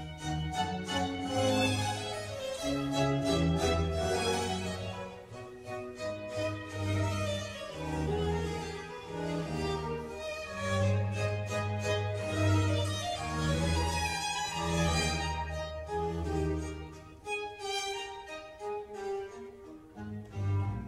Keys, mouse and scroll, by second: 0.2-1.2 scroll up 4, 2.6 shift+click, 4.0 shift+click, 4.8-5.3 scroll down 2, 5.3 middle click, 6.1 g, 11.4 scroll down 1, 11.7-14.7 middle drag, 14.7 g, 16.8 middle click, 17.6 click, 17.9-19.5 middle drag, 19.5-20.1 scroll up 1, 20.1 ctrl+r.